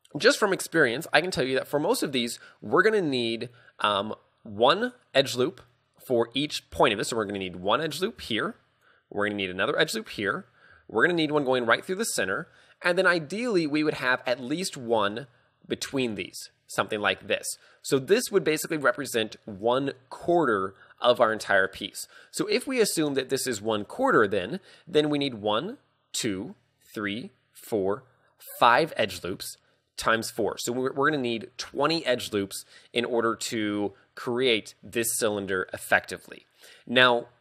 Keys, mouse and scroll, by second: 8.1-10.7 typing, 8.4 click, 11.1 ctrl+click, 15.0 d, 15.2 ctrl+click, 17.0 ctrl+click.